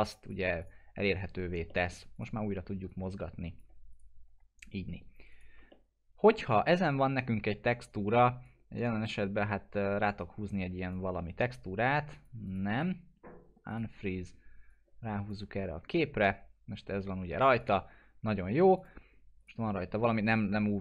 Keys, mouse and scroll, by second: 0.1 click, 1.7 alt+middle click, 2.1 click, 3.9 right click, 5.3 click, 5.7-6.6 alt+middle drag, 8.8-9.1 drag, 10.5-11.1 drag, 12.7 right click, 13.7 click, 15.0-15.3 drag, 15.9-17.5 alt+middle drag, 17.6 click, 17.9-18.4 scroll up 1, 18.4 middle click, 18.8 click, 19.4 right click.